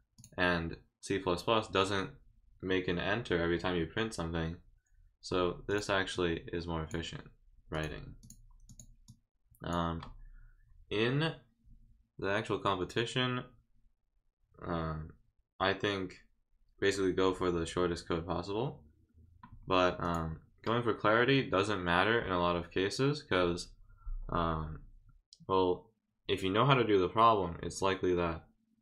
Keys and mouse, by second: 0.2-1.2 drag, 5.7 click, 6.1 click, 7.7 click, 8.2 click, 8.7 click, 9.1 click, 20.0 click.